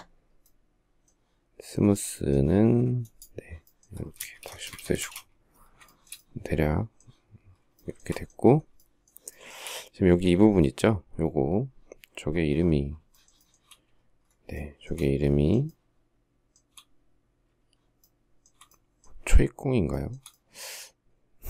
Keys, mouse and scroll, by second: 3.5 space, 3.7 Escape, 4.0 space, 4.1 Escape, 4.4 space, 4.5 Escape, 5.4 shift+middle click, 7.2 shift+middle click, 8.1 shift+middle click, 8.8 shift+middle click, 12.5 shift+middle click, 12.8 shift+middle click, 13.9 shift+middle click, 15.0 shift+middle click, 17.4 shift+middle click, 19.3 shift+middle click, 21.1 shift+middle click.